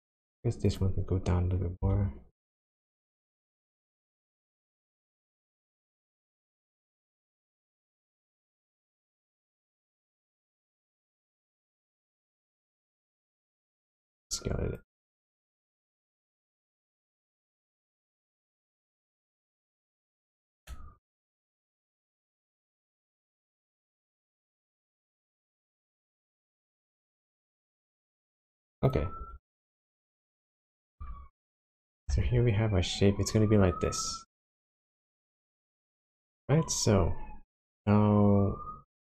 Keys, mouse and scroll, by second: 0.0 Tab, 0.7 click, 1.8 g, 4.3 click, 4.8 click, 5.3 g, 6.4 right click, 7.2 shift+z, 7.8 click, 8.6 g, 10.5-11.6 scroll down 5, 13.7 click, 16.4 s, 17.4 z, 20.3 click, 21.1 Tab, 21.5 Tab, 22.1 click, 23.3 g, 24.0 click, 25.7 click, 25.9 g, 28.4 click, 28.8 click, 29.3 g, 30.4 click, 31.0 Tab, 32.2 shift+z, 32.6-33.3 scroll down 1, 37.3-38.8 scroll down 1.